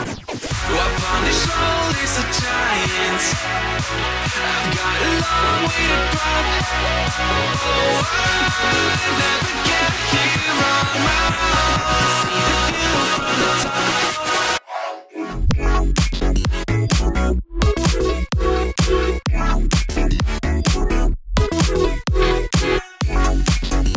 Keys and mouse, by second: 0.5 click, 1.0 g, 1.8 click, 2.0 g, 2.6 z, 3.1-4.9 drag, 5.3 click, 6.2 click, 6.5 shift+click, 7.6 j, 8.0 2, 8.2 click, 8.5 x, 10.0 click, 10.6-12.3 drag, 12.6 click, 13.4 shift+click, 14.1 click, 14.7 shift+click, 15.6 n, 17.7 click, 18.7 click, 20.3 alt+click, 20.7 click, 23.1 click.